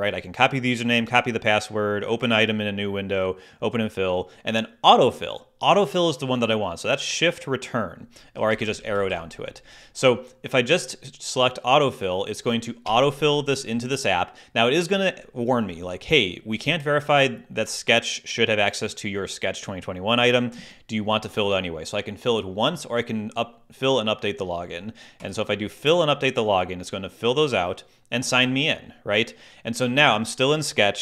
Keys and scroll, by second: 8.3 Down, 12.8 Return.